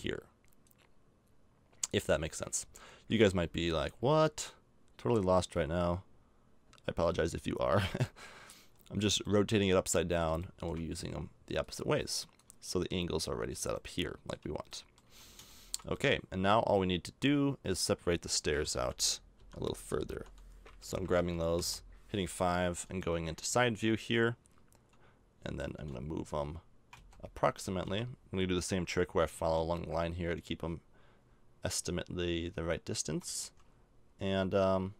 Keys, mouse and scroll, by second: 0.6-2.5 drag, 2.5 middle click, 3.2 middle click, 3.8-5.3 drag, 5.5 click, 5.5 middle click, 7.7 KP_5, 12.7-14.0 middle drag, 14.8 middle click, 15.0 a, 15.6 middle click, 16.1 middle click, 18.7-21.6 typing, 25.7 g, 29.3 g.